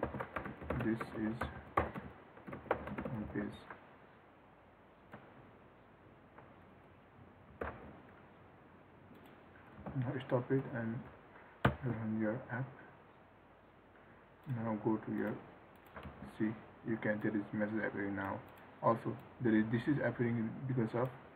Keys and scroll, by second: 7.9 ctrl+s, 10.2 ctrl+c, 16.4 ctrl+r.